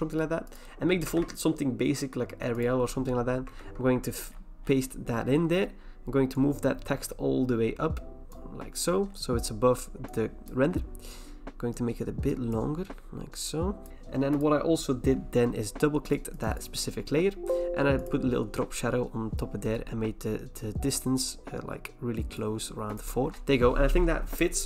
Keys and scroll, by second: 0.8-2.2 typing, 3.6 ctrl+v, 23.3 Return.